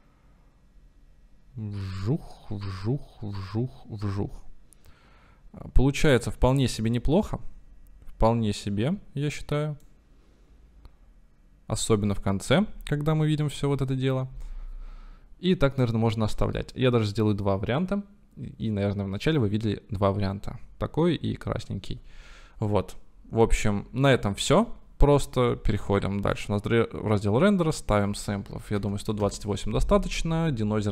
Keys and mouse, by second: 1.0-11.6 right drag, 27.9-30.9 right drag.